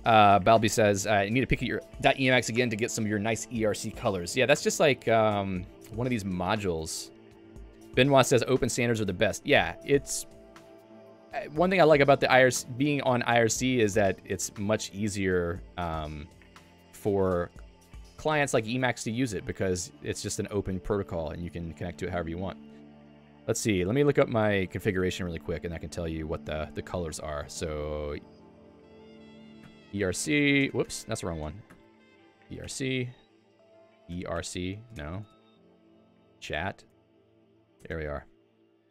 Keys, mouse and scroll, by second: 5.7 Escape, 28.7 ctrl+g, 30.7 ctrl+g, 38.0 Return.